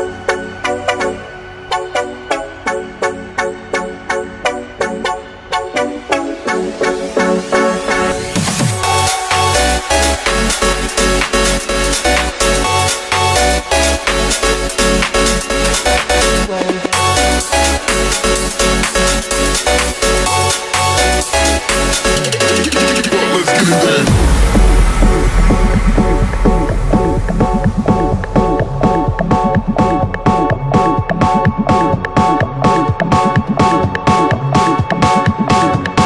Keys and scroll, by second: 15.4 ], 16.5 [, 16.6 [, 17.1 [, 23.4-26.2 typing, 27.7-30.7 typing, 31.9 [, 32.3 [, 32.6 [, 35.6 ], 35.9 ].